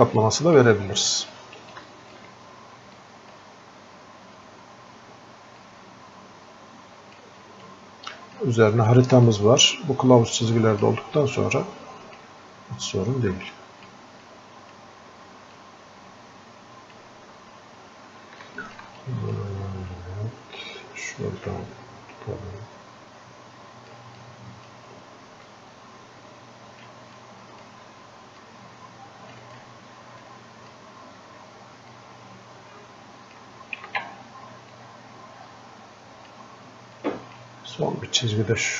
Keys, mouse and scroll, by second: 14.3-17.7 drag, 17.7 scroll up 1, 18.8-29.8 alt+drag, 30.6-38.7 drag.